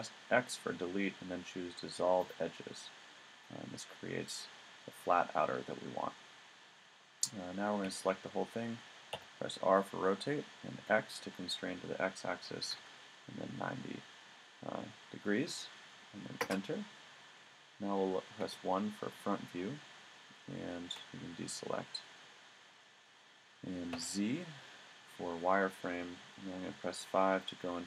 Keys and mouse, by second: 7.8 a, 9.2 r, 18.4 KP_1, 20.9 a, 23.9 z, 26.7 KP_5.